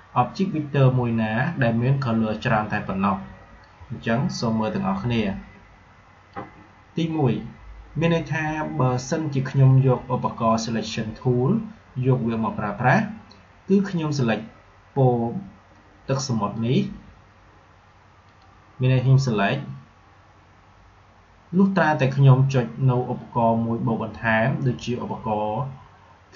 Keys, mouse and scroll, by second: 16.5 click.